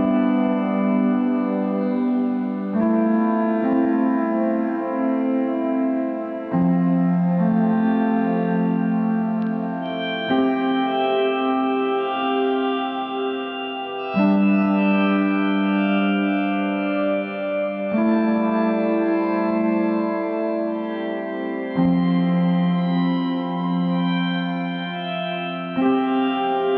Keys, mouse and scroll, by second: 6.6 middle click, 7.5-7.9 scroll up 1, 7.9-11.1 middle drag, 11.1 click, 13.0 right click, 13.4 scroll up 3, 13.9-18.2 middle drag, 21.7-22.2 scroll down 3, 22.2-23.6 middle drag, 23.6-24.0 scroll down 1, 24.0-26.2 middle drag.